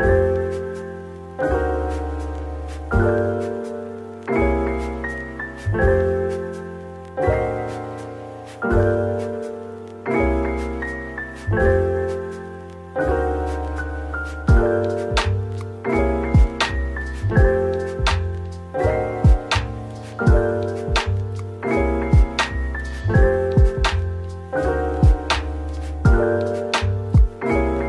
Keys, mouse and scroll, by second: 0.5 shift+click, 0.9 /, 1.7 Tab, 2.3 /, 4.2 ctrl+l, 4.8 x, 6.2 scroll, 6.2-8.5 scroll down 1, 8.6 shift+click, 11.0 ctrl+l, 11.7 typing, 13.2 Tab, 13.6-15.2 typing, 16.6-17.1 scroll up 1, 17.1 middle click, 19.5 shift+click, 19.8 typing, 22.0-23.0 typing, 23.0 right click, 23.8 double click, 24.5 middle click, 26.7-27.6 typing.